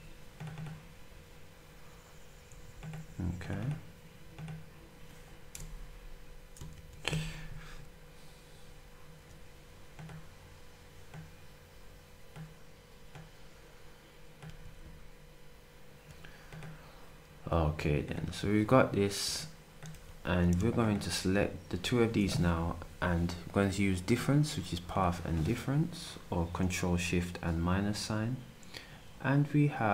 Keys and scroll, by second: 2.5 s, 5.5 Delete, 14.4 s.